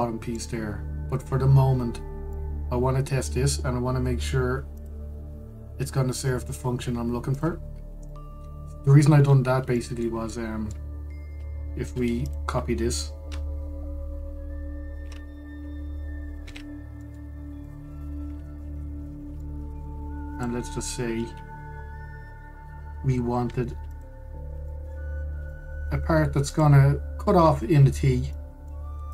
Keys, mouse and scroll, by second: 0.2-1.0 scroll up 2, 1.0-5.4 middle drag, 5.4 click, 8.0 click, 8.4-8.8 scroll, 8.8-10.0 middle drag, 10.0-10.4 scroll, 10.4-12.5 shift+middle drag, 12.5 Tab, 12.9 click, 17.1 shift+d, 18.6-19.4 middle drag, 19.4-20.1 scroll up 2, 20.1-20.4 shift+middle drag, 20.4 scroll up 1, 21.0 click, 22.0 Tab, 22.9 2, 24.6 alt+shift+click, 25.4 middle click, 25.8 scroll up 1, 26.2-27.2 shift+middle drag, 27.2 alt+shift+click, 29.0 middle click.